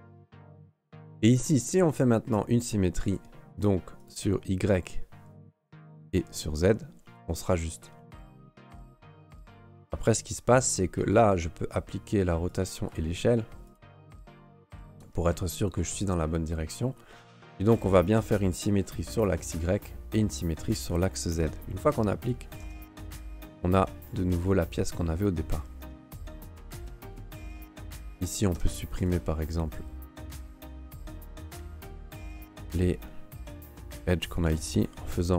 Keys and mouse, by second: 2.3 click, 3.0 click, 4.0 click, 6.1 click, 8.3 click, 8.6 click, 9.7 right click, 10.6 ctrl+a, 13.6 click, 14.4 click, 19.4 click, 20.7 click, 22.6 Tab, 23.5 ", 24.0-25.2 middle drag, 25.9 shift+middle click, 27.2 ", 27.8 alt+click, 28.6 ctrl+Tab, 30.2 alt+shift+right click, 31.0 alt+shift+right click, 32.0 alt+right click, 32.8 alt+shift+right click, 33.5 alt+shift+right click, 34.2 alt+shift+right click.